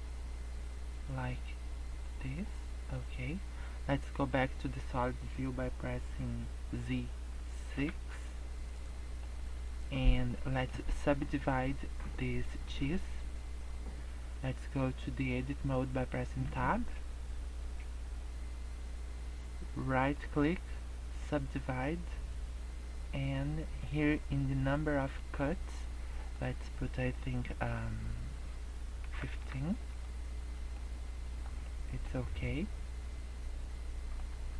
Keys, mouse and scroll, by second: 2.4 middle click, 3.4 middle click, 6.6 z, 8.7 middle click, 9.4 middle click, 10.2 scroll up 2, 10.4 middle click, 10.8 scroll down 2, 10.9 middle click, 12.4 middle click, 16.5 Tab, 20.0 right click, 26.2 click, 30.4 scroll up 2, 30.8 middle click, 31.5 scroll down 2, 31.6 middle click, 32.0 scroll up 2, 32.3 scroll down 2, 32.6 scroll up 1, 33.0 scroll down 1, 33.2 scroll up 2, 34.3 Tab.